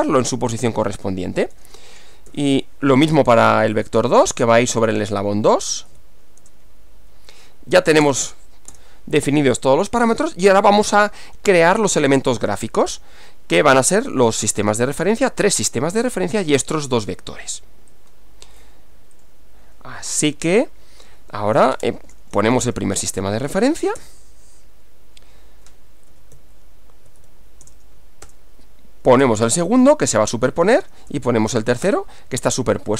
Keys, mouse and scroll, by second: 0.2 v, 1.0 2, 1.6 BackSpace, 4.4 BackSpace, 4.5 2, 4.8 Left, 6.4 BackSpace, 6.6 2, 8.0 Return, 8.8 Return, 18.0 click, 19.2 click, 21.6-23.7 typing, 24.0 Return, 26.1 Up, 26.4 Left, 27.6 BackSpace, 27.8 1, 28.2 Return, 29.2 Up, 29.5 Left, 31.0 BackSpace, 31.2 2, 31.9 Return.